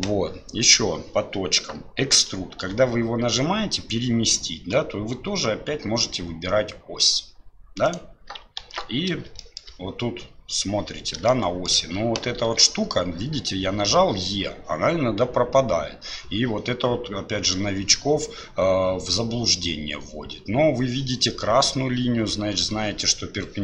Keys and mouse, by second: 2.6 e, 8.6 ctrl+z, 9.4 shift+click, 11.3 shift+click, 12.4 e.